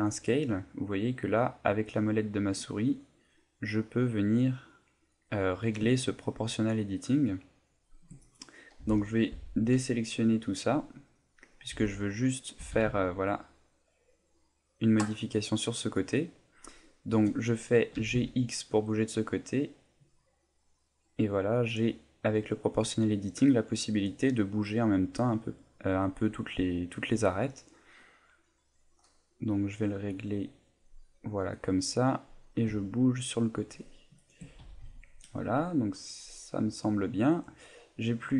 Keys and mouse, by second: 8.3 right click, 8.8 z, 9.3 b, 11.7 z, 12.6 g, 16.0 right click, 34.3 shift+click, 34.6 a, 35.8 middle click, 36.7 middle click.